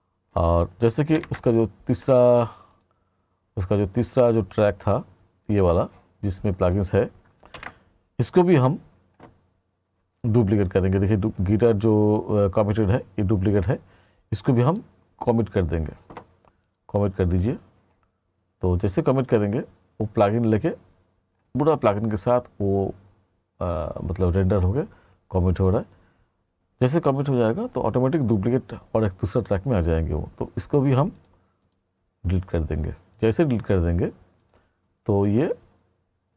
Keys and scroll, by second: 1.2 ctrl+=, 7.6 ctrl+=.